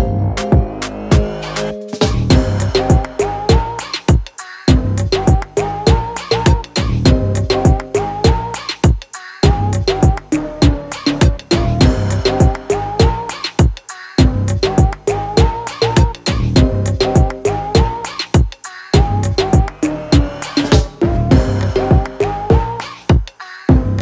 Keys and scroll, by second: 4.9 v, 6.1 ctrl+b, 7.0 Escape, 7.2 ctrl+b, 8.2 Return, 8.7 ctrl+z, 9.0 ctrl+alt+b, 10.2 ctrl+z, 10.4 ctrl+alt+b, 11.1 ctrl+z, 11.3 ctrl+alt+b, 11.7 ctrl+t, 12.9 ctrl+z, 13.1 ctrl+t, 13.3 Return, 14.2 e, 16.2 v, 18.5 ctrl+m, 19.7 Return, 19.8 typing, 20.4 ctrl+0, 21.7 ctrl+t.